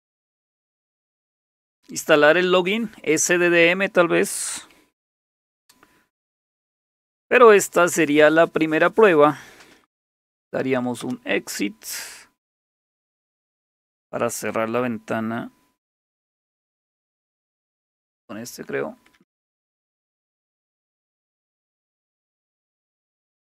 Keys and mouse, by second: 0.0-0.3 typing, 5.3 super+1, 9.8-11.1 typing, 17.9 shift+super+q, 19.1-20.0 typing, 21.8-23.0 typing.